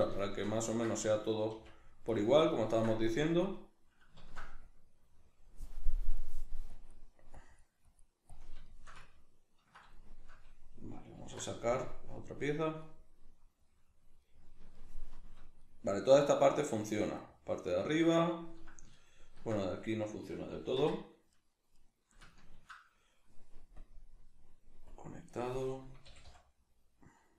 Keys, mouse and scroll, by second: 1.0-2.2 drag, 1.5 f, 2.6 ctrl+middle click, 3.0-8.6 drag, 4.2 ctrl+z, 8.6-20.8 shift+middle drag, 11.2 alt+h, 20.8 Tab, 21.3 right click, 21.7 right click, 22.3-23.8 ctrl+middle drag, 23.8-26.1 drag, 26.1 g.